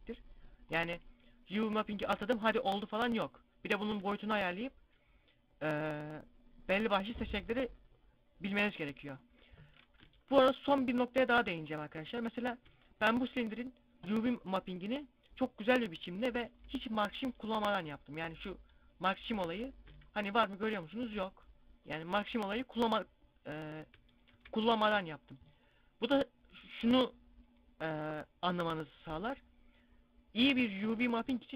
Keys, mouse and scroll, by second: 2.3 right click, 3.9 s, 7.1-9.9 drag, 9.9 Tab, 11.2 z, 12.1 z, 12.6 Tab, 17.5 ctrl+e, 19.3 z, 19.8 a.